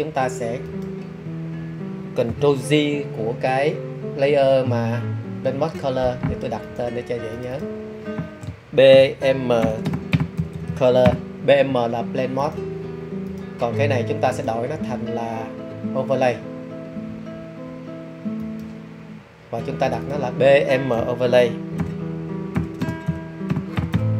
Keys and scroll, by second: 5.7 super+j, 8.8-10.6 typing, 21.7-24.1 typing.